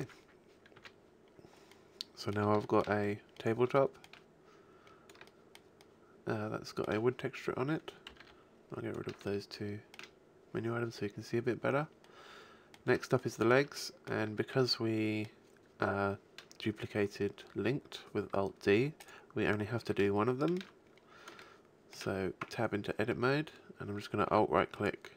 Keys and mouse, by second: 8.2 n, 8.2 t, 10.8-12.0 middle drag, 19.0-20.2 right drag, 19.8 shift+KP_1, 22.4 Tab.